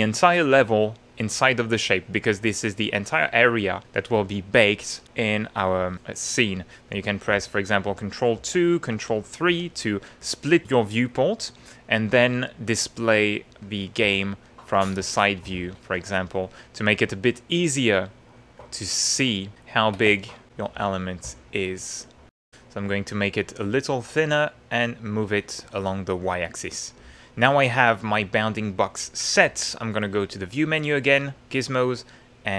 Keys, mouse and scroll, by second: 0.0-2.1 drag, 3.1-4.2 middle drag, 6.9 ctrl+2, 7.8 ctrl+3, 8.3 ctrl+1, 8.9 ctrl+2, 9.5 ctrl+3, 10.4 ctrl+2, 11.1 click, 13.2 click, 13.8 ctrl+middle click, 14.4-15.8 ctrl+middle drag, 16.4 click, 19.1 click, 20.2 ctrl+shift+middle click, 20.8 shift+middle click, 21.4 shift+middle click, 21.6 shift+middle click, 22.3 shift+middle click, 22.8 middle click, 24.1 click, 24.3-25.5 middle drag, 25.7-27.4 middle drag, 30.2 click, 31.4 click.